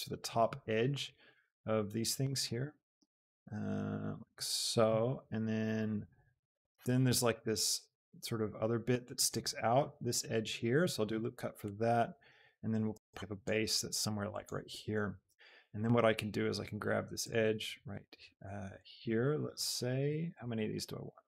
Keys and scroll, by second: 2.8 g, 3.1 z, 7.5 ctrl+r, 13.1 ctrl+r.